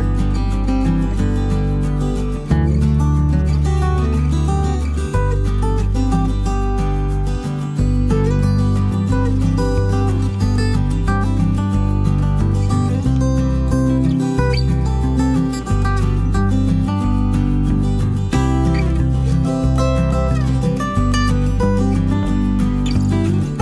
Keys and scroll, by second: 2.2-2.9 typing, 3.5 ctrl+s, 8.0 b, 17.6 b.